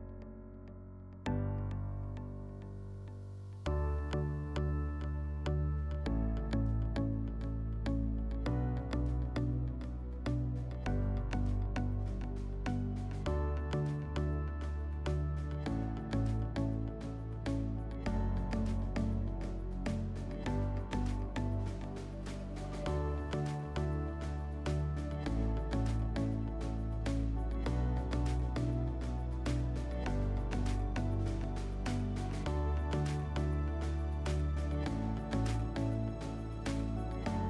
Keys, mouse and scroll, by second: 1.8-3.3 drag, 4.4 click, 5.5 alt+middle click, 6.1 alt+middle click, 8.1 click, 9.4 click, 9.6 click, 10.3 5, 11.4 click, 12.6 alt+middle click, 19.4 shift+click, 21.3 click, 22.5 click, 23.3 ctrl+a, 25.5 middle click, 28.0 click, 33.3 click, 34.1 click, 34.4 click, 36.1 click, 37.0 F4.